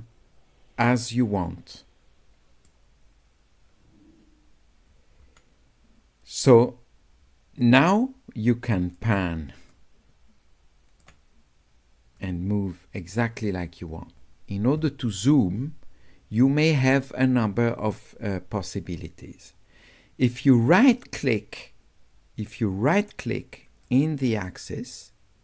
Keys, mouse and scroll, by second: 7.6-9.0 drag, 9.7-11.0 drag, 12.2-14.2 drag, 23.9-25.4 right drag.